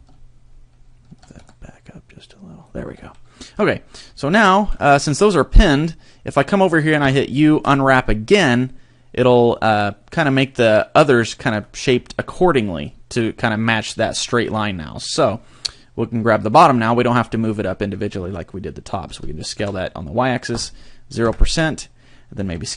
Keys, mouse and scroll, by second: 1.1 g, 2.7 click, 3.0 a, 4.0-4.3 scroll down 3, 4.3 shift+middle click, 7.0 u, 11.3 shift+middle click, 11.7 scroll up 3, 12.1 shift+middle click, 15.1 alt+right click, 19.1 s, 22.4 s.